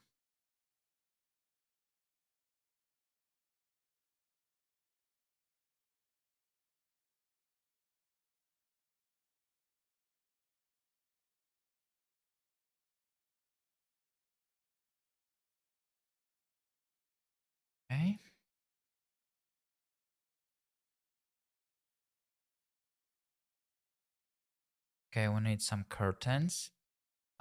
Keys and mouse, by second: 1.4 r, 1.5 z, 1.8 KP_9, 1.8 KP_0, 2.6 KP_Enter, 3.5 g, 3.6 z, 3.9 click, 4.1 y, 5.1 click, 5.4 g, 5.6 x, 6.9 click, 7.3 g, 7.5 y, 8.1 click, 8.2 g, 8.3 x, 12.2 shift+click, 12.9-15.2 typing, 13.8 click, 14.5 click, 15.6 click, 16.6 middle click, 19.4 shift+click, 19.9 shift+click, 20.3 g, 20.6 shift+z, 21.1 click, 24.8 click, 26.9 click.